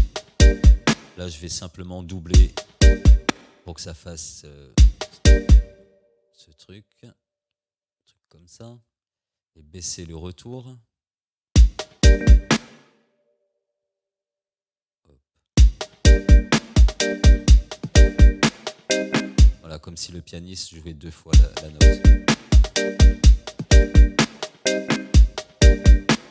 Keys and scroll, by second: 3.3 space, 4.8 space, 11.5 space, 15.5 space, 19.5 space, 21.3 space.